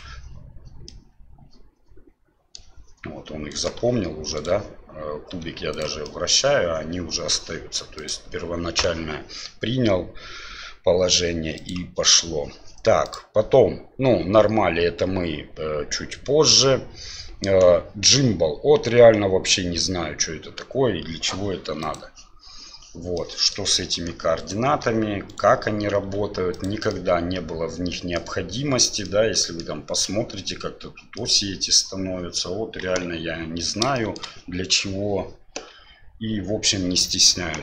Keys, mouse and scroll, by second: 0.8-2.6 middle drag, 3.5 right click, 3.8 r, 5.3 r, 6.0-6.4 middle drag, 7.9-12.0 drag, 13.1-22.2 drag, 23.1-23.5 middle drag, 24.4 right click, 24.8 r, 26.0 r, 26.9-28.2 middle drag, 29.0-29.6 middle drag, 31.1-32.4 middle drag, 32.8 KP_1, 34.1 middle click.